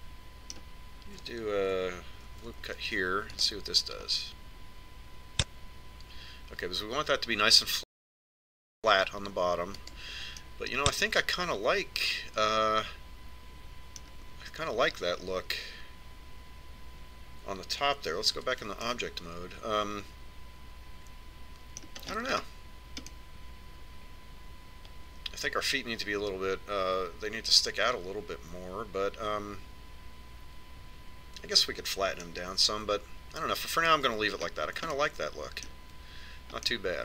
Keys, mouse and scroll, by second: 4.3 ctrl+r, 11.4-13.4 middle drag, 19.4 Tab, 19.9-21.6 middle drag, 23.1-26.0 middle drag, 35.5-36.0 scroll up 1, 36.0-37.0 middle drag.